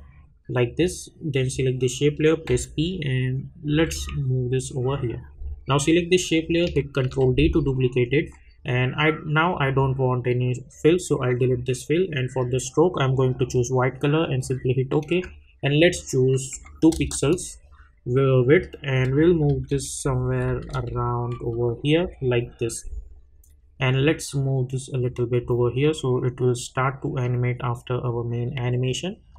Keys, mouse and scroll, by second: 2.5 p, 3.7 Right, 5.1 click, 7.0 ctrl+d, 9.5 click, 16.9 Return, 18.4 click, 19.0 Up, 20.0 Left, 21.3 Up, 22.0 Left, 22.8-29.3 drag.